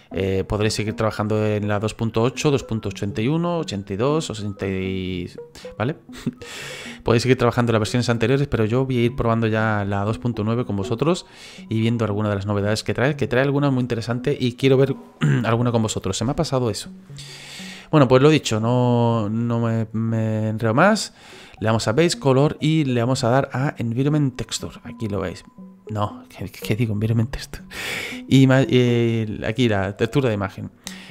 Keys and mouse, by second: 19.4 click, 19.9 click, 22.0 click.